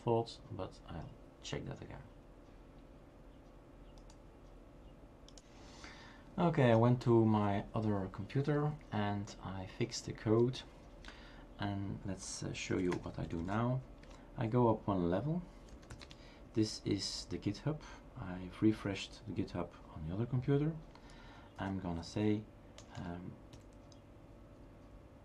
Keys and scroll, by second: 12.5-13.3 typing, 15.0-16.2 typing, 21.4-23.5 typing.